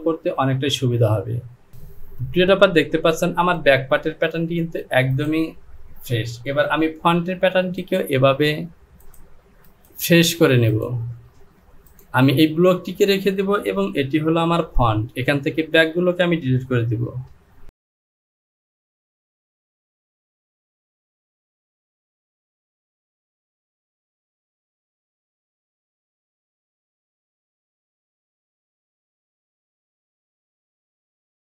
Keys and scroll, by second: 11.6 j, 14.5 Home, 17.1 Delete, 20.4 Delete, 22.6 Delete.